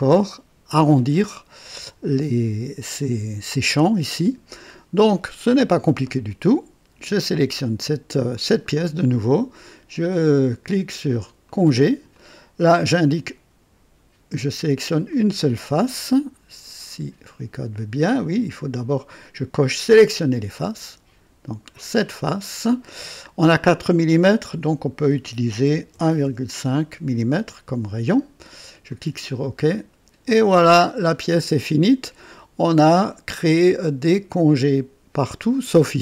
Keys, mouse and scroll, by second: 0.0-0.7 right drag, 7.4 click, 8.3 click, 11.4 click, 12.1 click, 15.0 click, 15.8 click, 16.9 right click, 19.8 click, 21.6 click, 24.3 click, 25.6 KP_1, 25.9 KP_Decimal, 26.2 KP_5, 28.8 click, 30.2-35.9 drag, 31.2 typing.